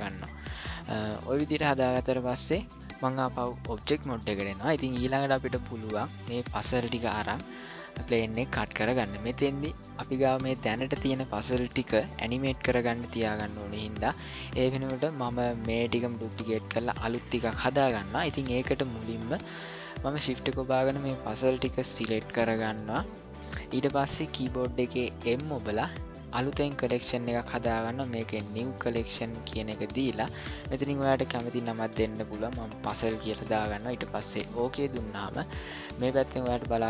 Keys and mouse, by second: 3.0 click, 4.9-6.3 ctrl+middle drag, 7.1-7.7 shift+middle drag, 20.6 shift+click, 21.2 shift+click, 21.7 shift+click, 25.2 m, 31.9 z.